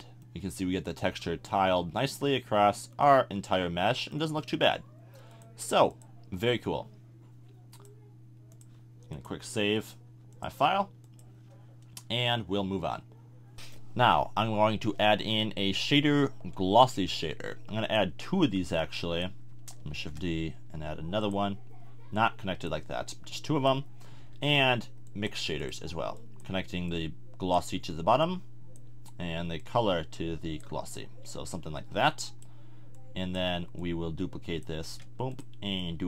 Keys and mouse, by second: 1.7-2.7 middle drag, 2.8-3.9 middle drag, 4.1-4.5 middle drag, 5.3 click, 15.0 shift+a, 19.9 shift+d, 24.2 shift+a, 34.8 shift+d.